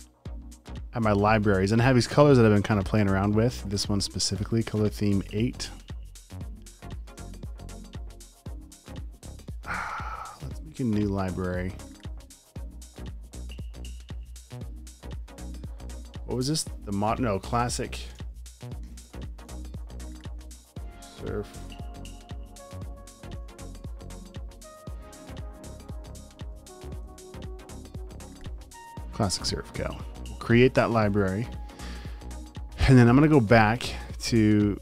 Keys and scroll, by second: 16.6 m, 17.7-20.5 typing, 22.3-23.9 typing, 25.9-27.8 typing.